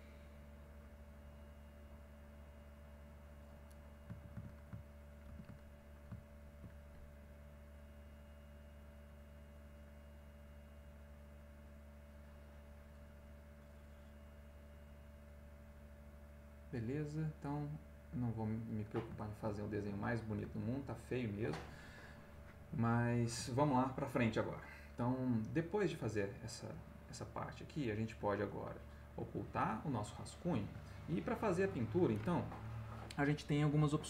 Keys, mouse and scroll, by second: 0.3-3.5 drag, 3.8 ctrl+middle click, 4.5 ctrl+middle click, 5.2 ctrl+z, 5.8-6.8 ctrl+middle drag, 7.7 click, 8.5 click, 9.3-12.9 drag, 13.0 middle click, 14.0 click, 14.5 click, 14.9 middle click, 15.8 click, 17.0 click, 18.0 click, 19.1 ctrl+middle click, 20.1 ctrl+middle click, 20.8 ctrl+middle click, 20.8-21.2 ctrl+scroll, 22.2 middle click, 22.2-22.9 scroll, 23.1-25.1 middle drag, 23.1-24.7 scroll, 25.2 ctrl+middle click, 25.2 ctrl+scroll, 27.8 click, 29.4 click, 30.0 middle click, 31.0-32.1 ctrl+middle drag.